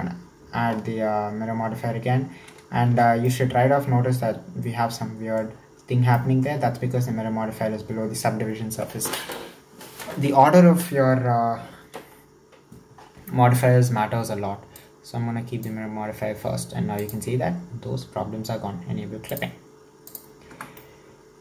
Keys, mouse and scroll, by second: 2.9 alt+z, 3.3-9.3 middle drag, 14.8 click, 17.0 click, 19.3 drag, 20.1 click, 20.5 Tab, 20.8-21.4 middle drag.